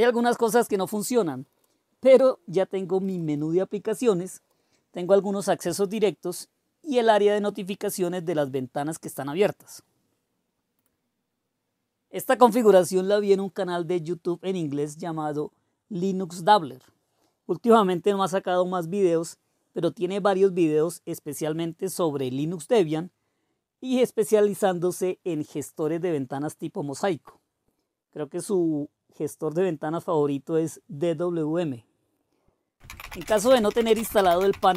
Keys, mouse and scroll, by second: 12.8 typing, 21.7-22.5 typing, 32.6-34.7 typing.